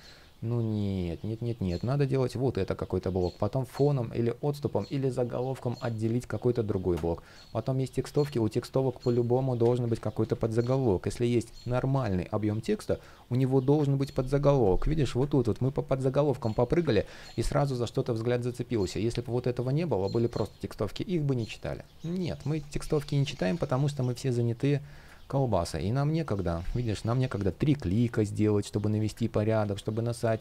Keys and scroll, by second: 8.5 super+z, 16.5 super+z, 26.3 super+space, 27.1 alt+shift+l, 29.2 super+z.